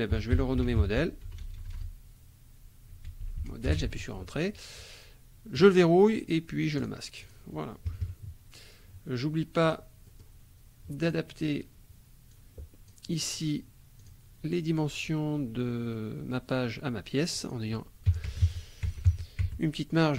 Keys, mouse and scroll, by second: 0.0-1.4 typing, 2.7-3.9 typing, 5.5 click, 6.8 click, 7.2 click, 7.9 KP_Subtract, 9.6 click, 10.1 middle click, 11.0 click, 12.3 click, 14.0 click, 17.3 click, 18.1 KP_5, 18.3 Tab, 18.4 KP_5, 18.9 Tab, 19.1 KP_5, 19.4 Tab.